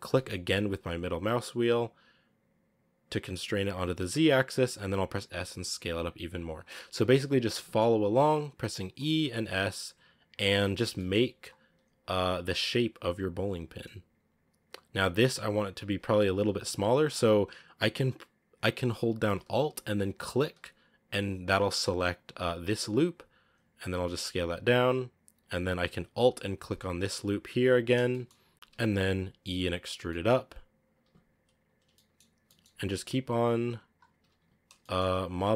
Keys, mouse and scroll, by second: 4.2-4.6 scroll down 3, 4.6 s, 6.6 scroll down 1, 6.7 shift+middle click, 7.3 e, 8.9 scroll up 3, 9.1 s, 10.4 shift+middle click, 10.8 e, 11.5 s, 20.1 alt+right click, 22.2 s, 23.9-26.4 shift+middle drag, 26.4 alt+right click, 27.9 shift+middle click, 28.4 scroll up 1, 28.8 e, 30.9 s, 31.8 shift+middle click, 32.2 e, 33.0 s, 34.2 s, 34.6 shift+middle click, 35.1 e.